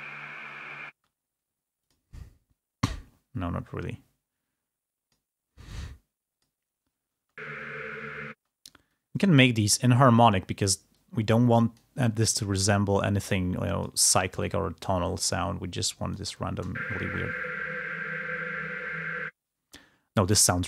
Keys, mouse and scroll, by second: 0.9 space, 1.7 click, 2.7-5.2 drag, 6.1 click, 8.3 space, 8.7-10.5 drag, 11.4 click, 12.2-14.0 drag, 15.3-16.9 drag, 16.9 space, 19.8 space.